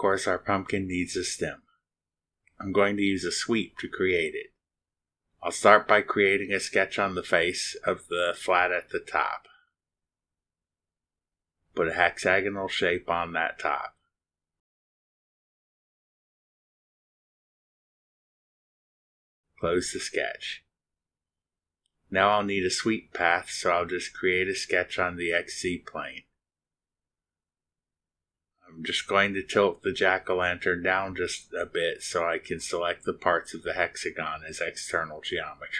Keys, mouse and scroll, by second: 1.2-4.4 drag, 4.6 middle click, 6.0 drag, 8.5 click, 9.7 click, 12.8 click, 15.4 click, 17.1 click, 18.9 click, 21.3 click, 22.1 click, 24.4 click, 26.4 click, 30.3-33.2 middle drag, 33.5 middle click.